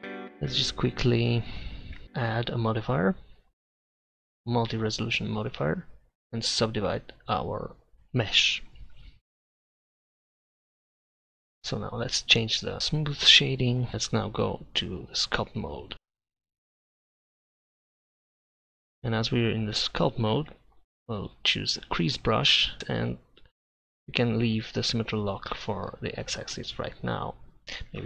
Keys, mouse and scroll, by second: 0.0 a, 2.0 Tab, 3.4 click, 11.4-12.7 drag, 12.7 middle click, 13.5 click, 18.7 click, 20.8-22.8 drag, 24.2-27.3 drag.